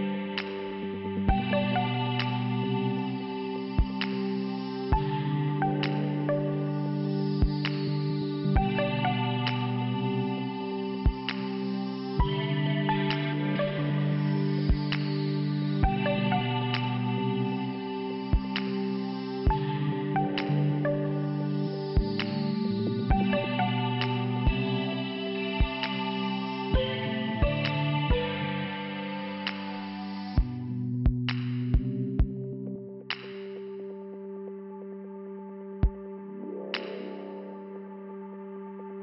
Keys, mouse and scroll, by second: 0.0 scroll up 1, 1.2 click, 2.3 click, 3.0 click, 4.3 click, 5.9 click, 6.0 click, 7.2 click, 9.7 click, 14.6 middle click, 21.0 click, 21.9 click, 23.6 click, 23.7 click, 24.7 click, 26.7 click, 28.9 click, 30.8 click, 31.5 click, 31.7 click, 32.4 click, 33.3 click, 34.2 click, 37.6 click, 38.3 click.